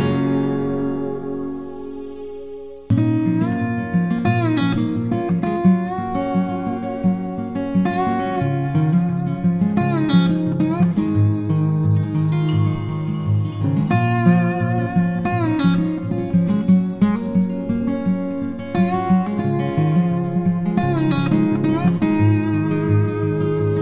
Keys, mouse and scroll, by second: 0.0-0.5 typing, 0.2 double click, 1.0 double click, 2.8 ], 2.9 double click, 3.1 double click, 4.2 typing, 4.5 double click, 9.2 typing, 15.1 double click.